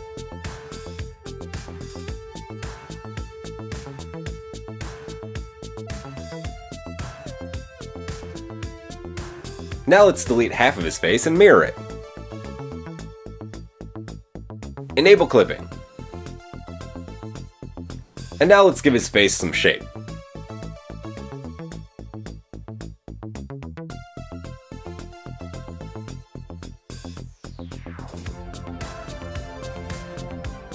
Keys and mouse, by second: 4.2 click, 6.1 click, 7.5-9.0 middle drag, 7.5 KP_1, 9.7 a, 9.8-10.2 middle drag, 9.8 a, 10.2-15.5 drag, 11.8 x, 14.2 ctrl+z, 15.5-16.6 middle drag, 16.6 click, 17.2-22.7 middle drag, 22.7 shift+drag, 22.9-24.9 middle drag, 24.9 click, 25.1 shift+middle click, 25.1-25.6 shift+drag, 25.6 shift+middle click, 25.9 shift+click, 25.9 shift+middle click, 26.0 shift+click, 26.2-28.1 shift+middle drag, 26.8 KP_7, 28.1 click, 28.3-29.1 shift+middle drag.